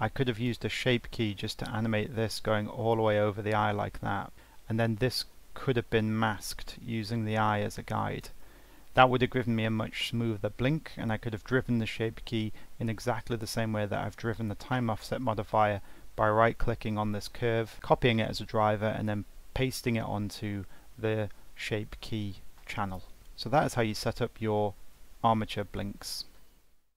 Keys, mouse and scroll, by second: 5.2-10.1 drag.